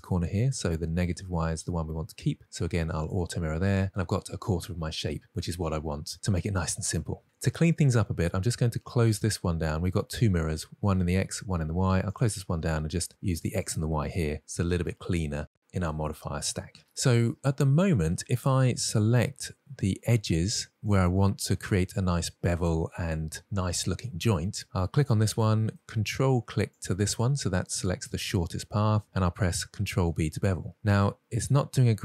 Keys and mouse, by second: 3.3 click, 4.0 middle click, 12.5 click, 14.0-16.3 drag, 17.2 middle click, 19.9 2, 20.2-20.5 middle drag, 21.2 click, 25.8-26.2 middle drag, 27.2 ctrl+click, 28.1 middle click, 30.0 ctrl+b.